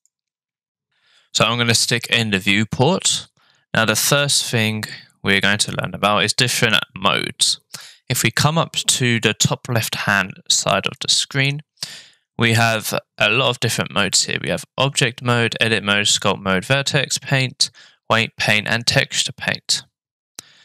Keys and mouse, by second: 0.0 click, 11.0-20.6 drag.